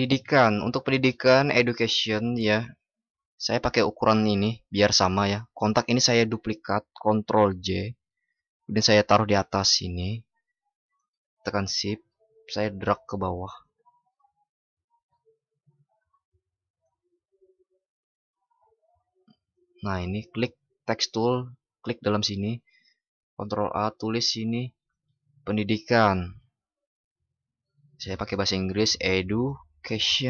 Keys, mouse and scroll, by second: 7.3 ctrl+shift+i, 23.1 ctrl+shift+@.